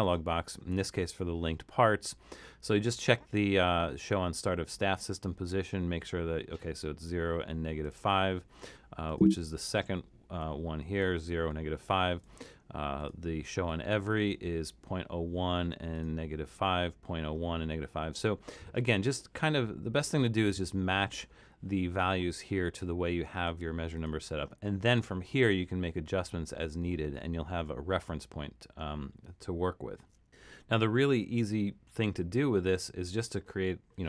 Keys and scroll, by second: 31.9 super+=, 32.6 super+=.